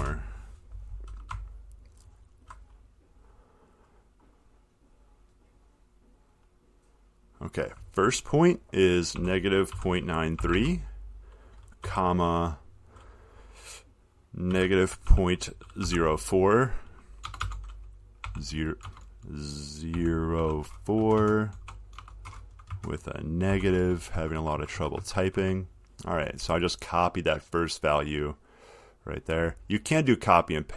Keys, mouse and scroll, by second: 0.0 Return, 0.2 Return, 0.6 scroll, 1.7-2.4 ctrl+scroll, 2.4-2.9 ctrl+scroll, 2.9-3.4 scroll, 3.5-4.4 scroll, 5.7 click, 9.4-12.6 typing, 14.7-17.6 typing, 19.1-21.2 typing, 22.9 Left, 24.4-25.1 typing, 28.4 click, 29.3 click.